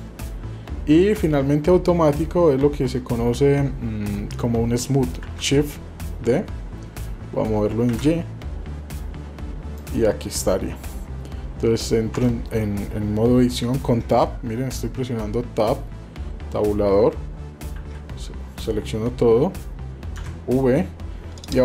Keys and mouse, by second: 2.8 Tab, 5.2 shift+d, 12.2 Tab, 13.6 shift+middle click.